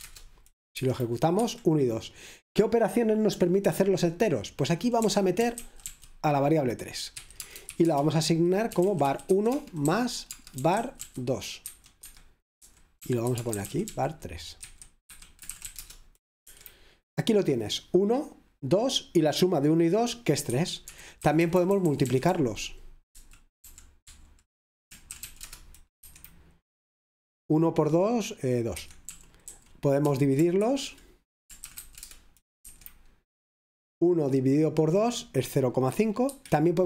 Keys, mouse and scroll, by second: 0.0-1.4 typing, 4.9-16.3 typing, 12.0 Escape, 15.1 Escape, 16.5 Return, 20.5 Escape, 20.9-22.6 typing, 24.1-26.5 typing, 28.7 Escape, 31.7 typing, 32.1 Return, 32.6 F5, 36.3 Escape.